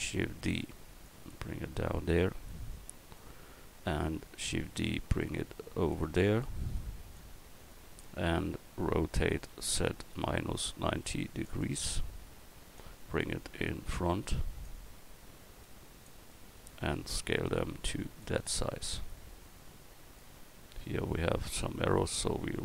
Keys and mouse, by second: 0.0 shift+d, 1.0-2.9 drag, 4.5 shift+d, 9.5 r, 14.7-15.6 drag, 16.9 click, 18.1 middle click, 18.5 click.